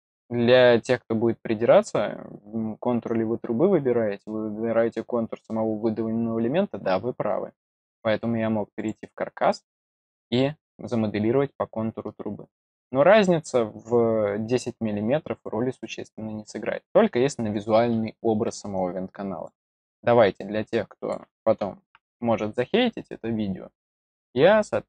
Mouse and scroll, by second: 7.7 click, 8.7 click, 15.2 scroll down 2, 15.7 middle click, 18.7-19.4 drag, 20.3-21.0 drag, 22.4 middle click, 23.0 middle click.